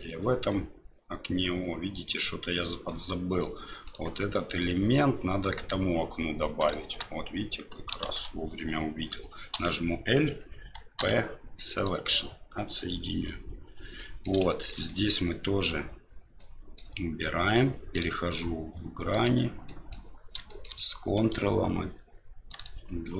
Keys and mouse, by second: 0.5-2.9 middle drag, 3.8 right click, 4.9-5.5 middle drag, 6.7 Tab, 8.0 alt+a, 9.5 l, 11.0 p, 14.0 middle click, 14.5 shift+middle click, 14.9 middle click, 16.4 middle click, 18.0 3, 19.1 right click, 19.6 middle click, 20.5 middle click, 22.5 ctrl+right click.